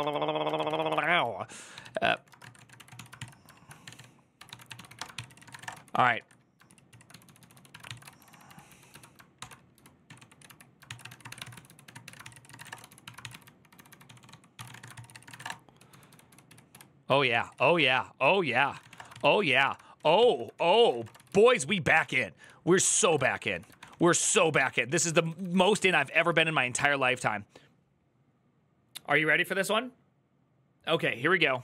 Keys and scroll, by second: 6.4 ctrl+c, 6.6-26.0 typing, 17.1 ctrl+c, 19.7 ctrl+n, 20.0 ctrl+t, 23.6 ctrl+d, 24.1 ctrl+d, 24.1 Return.